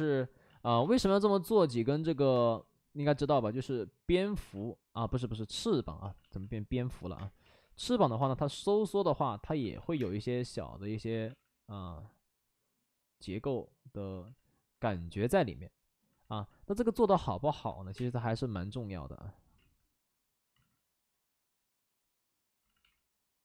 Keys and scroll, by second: 0.4 ctrl+z, 0.7 ctrl+z, 1.0 space, 2.0 ctrl+z, 2.3 space, 4.1 ctrl+z, 4.3 ctrl+z, 6.0 ctrl+z, 7.1 space, 7.4 ctrl+z, 8.2 space, 9.5 ctrl+z, 11.0 ctrl+z, 11.2 ctrl+z, 17.8-18.6 typing, 19.5 ctrl+z, 20.5 ctrl+z, 22.6 ctrl+z, 22.7 ctrl+z.